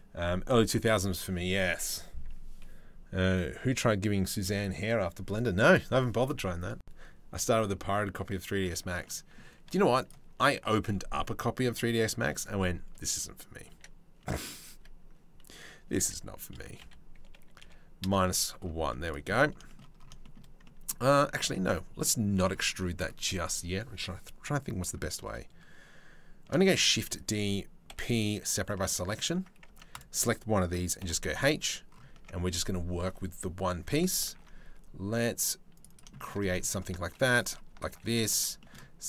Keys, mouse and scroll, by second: 8.6 middle click, 9.2 z, 10.0 middle click, 10.8 middle click, 13.3 e, 14.3 a, 15.6 e, 18.4 z, 18.9 middle click, 19.2 shift+middle click, 19.8 middle click, 20.2 middle click, 20.9 ctrl+z, 21.6 middle click, 22.3 click, 26.2 shift+d, 27.5 p, 28.8 click, 29.3 Tab, 29.5-30.6 drag, 30.6 h, 31.0 click, 31.7 Tab, 33.9 ctrl+r, 35.7 shift+middle click, 36.0 middle click, 36.6 ctrl+r, 37.4 ctrl+r, 38.2 shift+middle click.